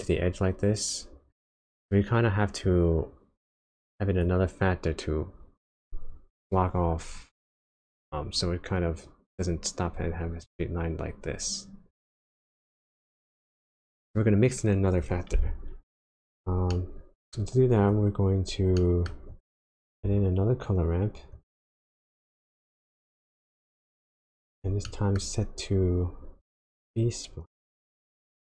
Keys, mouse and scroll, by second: 2.6 click, 3.6 click, 10.4 click, 11.9 click, 12.6 click, 13.5 click, 16.1 click, 16.7 middle click, 17.4-17.8 scroll up 2, 17.8 click, 18.1-18.7 scroll down 4, 18.7 middle click, 19.2-19.6 scroll up 2, 19.3 click, 19.8 shift+a, 20.1-20.5 scroll up 2, 24.8 middle click, 25.2-25.8 scroll up 3, 25.8-26.4 scroll down 3, 26.4 click.